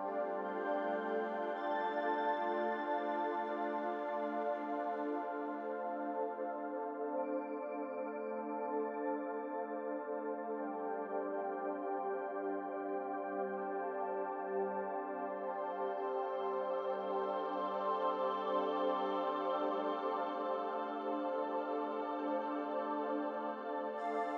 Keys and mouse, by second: 1.3 ctrl+z, 8.9 shift+a, 10.9 shift+a, 11.8 s, 12.7 click, 14.0 click, 14.7 g, 17.5 s, 19.8 g, 21.8 s, 23.7 g.